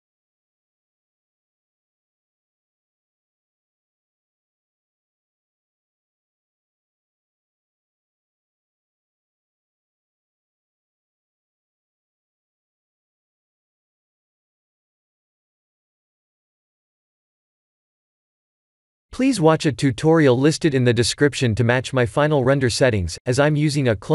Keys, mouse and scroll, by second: 0.1 middle click, 1.8 shift+middle click, 2.3 middle click, 7.4 shift+middle click, 9.5 middle click, 13.6 ctrl+alt+KP_0, 14.3 shift+`, 21.6 click, 22.3 click, 24.0 click.